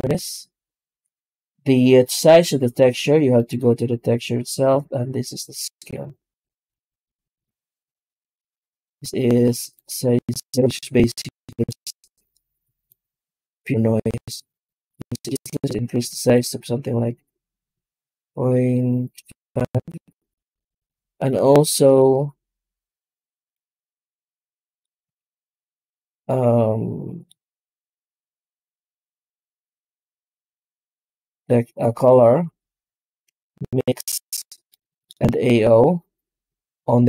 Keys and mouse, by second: 3.2 click, 5.5-8.7 drag, 9.6-11.2 drag, 12.9-15.2 drag, 16.2-19.3 drag, 22.2 middle click, 23.7-24.7 middle drag, 26.3 shift+a, 28.0 click, 28.8 shift+a, 34.3 middle click, 35.0 shift+a.